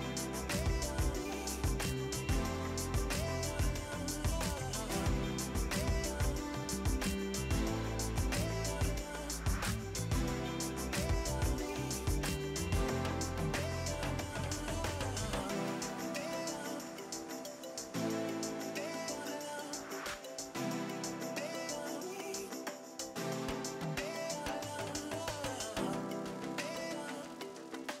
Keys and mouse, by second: 0.0 ctrl+shift+x, 0.2 click, 1.2 Escape, 5.3 click, 7.0 Delete, 7.4 click, 21.2 shift+f, 21.5 shift+b, 22.2 click, 24.4 y, 25.6 click, 26.0 Escape, 26.1 click, 27.0-28.0 typing.